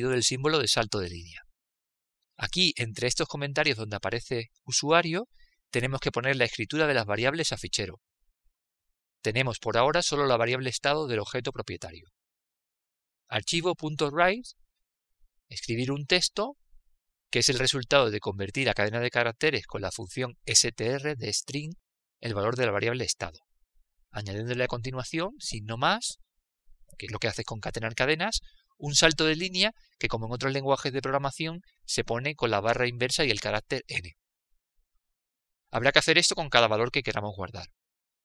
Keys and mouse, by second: 1.8-6.8 drag, 7.3 click, 13.4 click.